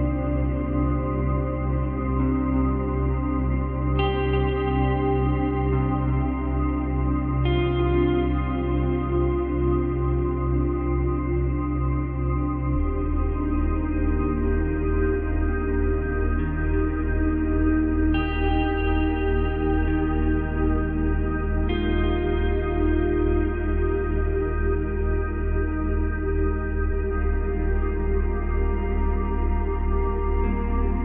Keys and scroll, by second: 5.2 space, 7.3 space, 10.5 space, 12.5 space, 27.5 space, 29.8 space.